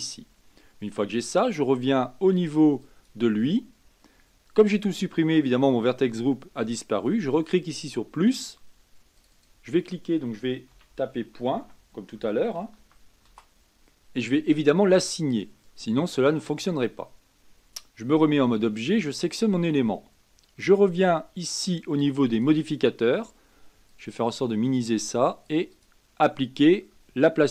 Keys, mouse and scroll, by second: 2.8 click, 7.7-9.2 drag, 9.3-12.4 drag, 15.6-17.1 drag, 17.1-18.1 scroll down 1, 18.1 Tab, 19.0 click, 22.3 click, 23.9 click, 24.7 click, 25.7-27.5 drag.